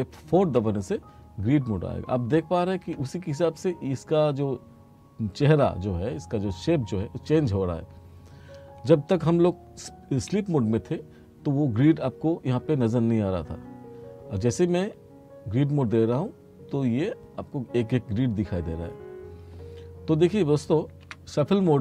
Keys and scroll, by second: 0.4 F4, 10.3 F2, 14.8 F4, 21.1 F1.